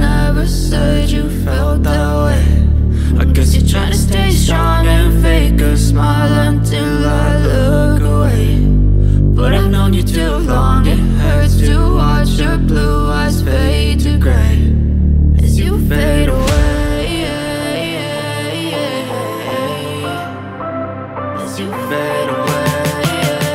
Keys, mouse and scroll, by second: 0.5 ctrl+0, 0.9-3.7 drag.